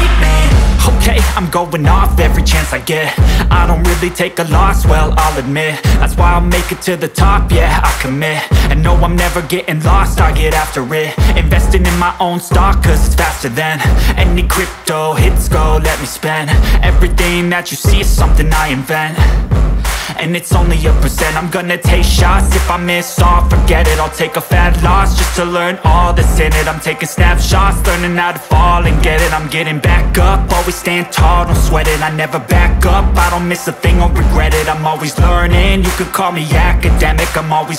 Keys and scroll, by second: 1.1 Delete, 12.9 Escape, 13.1 F2, 22.7 space, 23.8 F2, 24.9 F10, 28.7 F3, 29.6 space, 33.7 F2, 37.4 F3, 37.7 space.